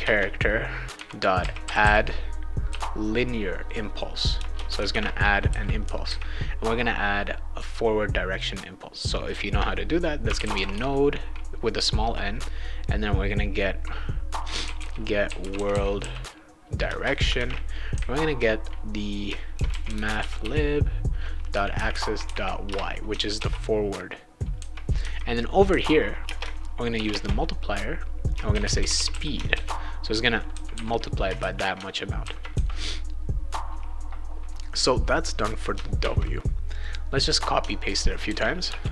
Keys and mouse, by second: 0.0-2.7 typing, 4.3 Return, 4.5-5.5 typing, 10.0-11.2 typing, 14.3-17.8 typing, 16.9 Return, 19.3-20.9 typing, 22.7 Return, 23.4 ctrl+s, 26.2 space, 26.9 shift+8, 27.1 space, 28.2-29.6 typing, 32.2 ctrl+c, 34.7 click, 36.0 ctrl+c, 36.7 click, 38.2 ctrl+v, 38.7 Return.